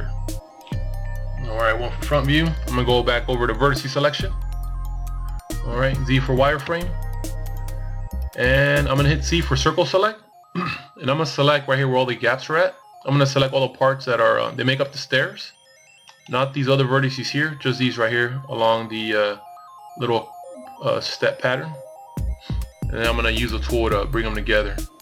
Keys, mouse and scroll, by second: 1.7 click, 3.8 z, 4.7 scroll up 1, 7.0 c, 13.2 right click, 21.4 c.